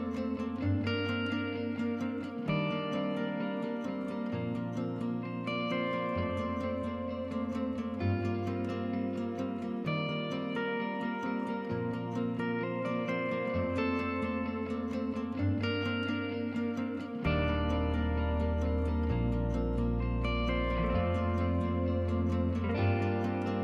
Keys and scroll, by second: 8.6-9.7 typing, 21.7-22.7 typing.